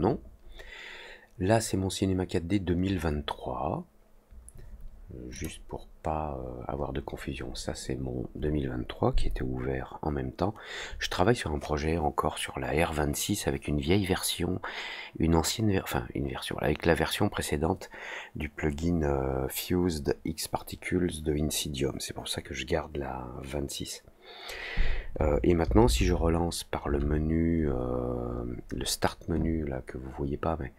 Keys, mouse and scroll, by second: 5.3 click.